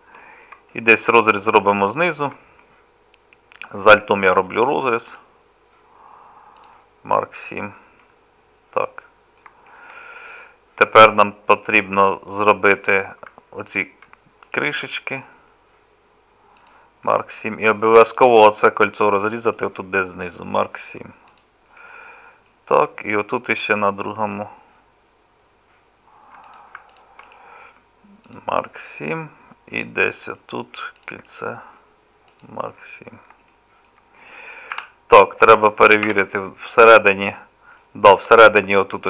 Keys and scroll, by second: 34.8 z, 36.1 3.